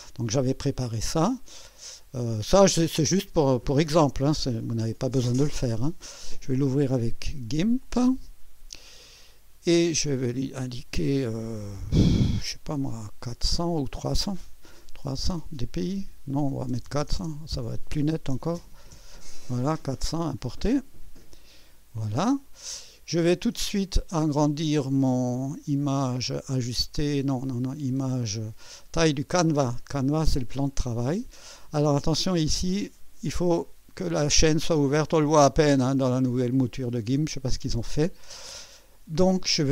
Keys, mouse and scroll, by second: 1.1 right click, 7.8 click, 10.4 click, 11.7-13.8 drag, 15.1 KP_0, 16.7 BackSpace, 18.0 KP_4, 18.4 KP_0, 18.9 Return, 20.8 click, 23.2 scroll down 1, 25.5 click, 29.1 click, 32.7 click, 33.9 click, 34.9 click, 35.5 click, 36.4 click, 39.5 click.